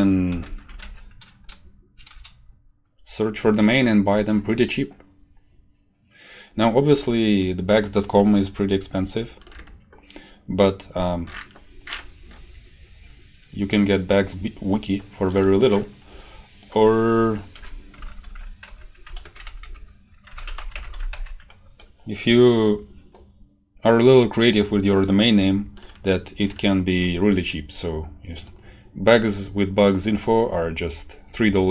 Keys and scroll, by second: 0.0-1.3 typing, 2.1 Return, 17.5 Home, 17.7-21.6 typing, 19.2 shift+Home, 19.4 Delete, 19.6 End.